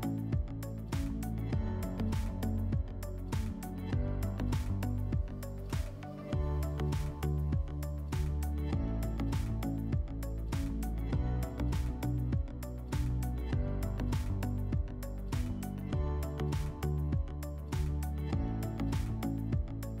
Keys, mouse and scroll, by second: 1.5 alt+middle click, 2.6 click, 5.9 alt+middle click, 11.5-13.6 drag, 13.8-15.6 drag, 17.3 click.